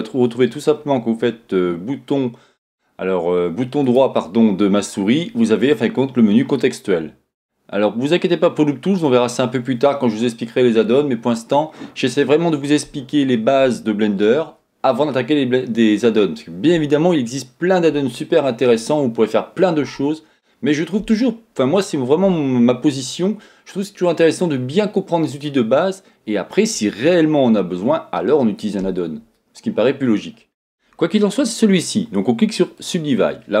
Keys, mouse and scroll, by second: 3.8-33.6 right drag.